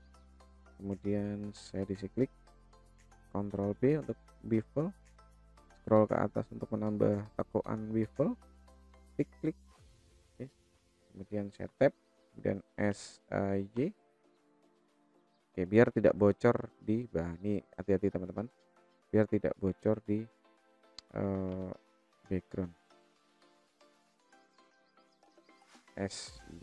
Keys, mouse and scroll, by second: 1.5 click, 3.3 ctrl+b, 9.2 click, 9.9 click, 11.3 Tab, 12.3 s, 15.6 KP_0, 22.6 click, 24.1-25.2 middle drag, 25.5 s.